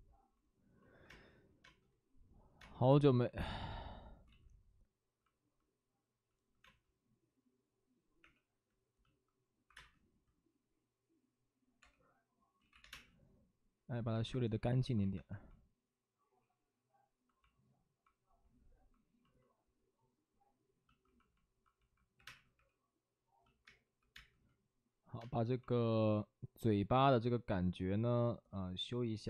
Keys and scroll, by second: 1.4 space, 1.4 1, 2.5 space, 4.2 ctrl+z, 6.5 space, 8.1 3, 9.3-10.1 typing, 11.7 space, 11.7 3, 12.5 ctrl+z, 12.7 3, 12.8 space, 14.0 1, 14.7 ctrl+d, 15.1 2, 22.1 3, 22.1 space, 22.5 3, 23.9 2, 24.0 space.